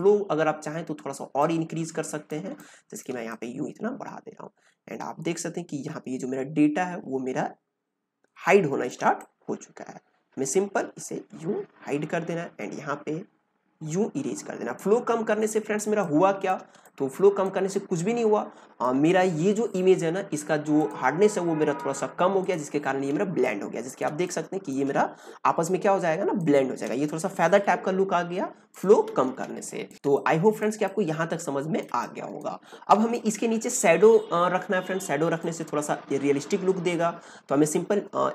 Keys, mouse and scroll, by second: 2.2 space, 2.5 click, 2.8 space, 3.2-8.2 drag, 8.2 space, 8.4 click, 8.7 space, 9.1-15.7 drag, 15.7 space, 15.9 click, 16.3 space, 16.8 click, 17.4 ctrl+space, 17.6 ctrl+click, 17.9 ctrl+space, 23.5 ctrl+click, 23.8 ctrl+space, 24.1 click, 24.4 space, 26.1 ctrl+space, 26.3 ctrl+click, 26.6 ctrl+space, 29.6 click, 29.7 ctrl+space, 29.8 ctrl+click, 29.9 ctrl+space, 30.1 click, 30.8-32.9 ctrl+drag, 32.9 ctrl+space, 33.1 ctrl+click, 33.4 ctrl+space, 35.3 click.